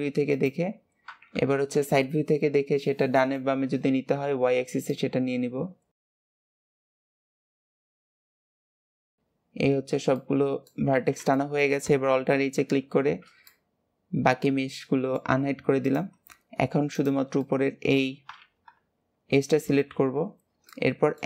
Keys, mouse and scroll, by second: 1.3 KP_1, 3.1-4.8 shift+middle drag, 4.8 click, 6.5 click, 7.0 shift+middle click, 7.2 click, 7.4 click, 7.9 shift+middle click, 8.1 click, 8.4 click, 8.7 scroll down 2, 8.9 shift+middle click, 8.9 click, 9.1 a, 9.4-10.1 scroll down 2, 10.1 middle click, 10.9 alt+z, 11.2-12.5 middle drag, 12.5 alt+h, 13.0 scroll down 1, 13.4-15.7 middle drag, 15.7 click, 16.8 shift+click, 17.3-18.5 middle drag, 18.5 KP_3, 19.5 alt+z, 20.6-21.2 middle drag.